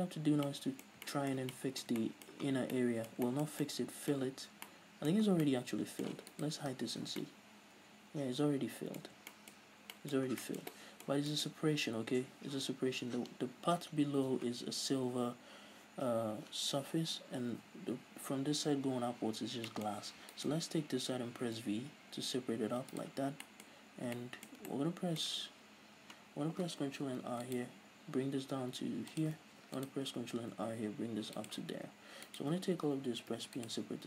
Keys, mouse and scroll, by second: 0.1-0.4 scroll up 1, 2.7 scroll down 1, 4.7 scroll down 2, 5.5 scroll down 2, 6.6 right click, 7.4 h, 7.5-12.2 middle drag, 9.3-9.6 scroll up 2, 9.9-10.5 scroll up 2, 10.5 scroll down 2, 12.2 right click, 12.4-16.8 middle drag, 12.4-16.8 scroll up 2, 16.8 Tab, 19.9-20.6 shift+middle drag, 20.6 alt+right click, 23.3 right click, 23.7-29.5 middle drag, 27.3 ctrl+r, 29.5 shift+click, 30.1 ctrl+r, 31.7 shift+click, 32.0-32.5 scroll down 1, 32.5 right click, 33.3 l, 33.6 p.